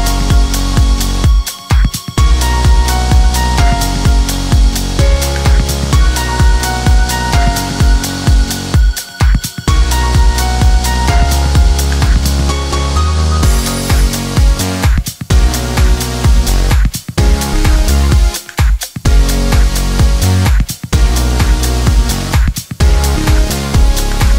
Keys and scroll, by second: 20.9 Escape.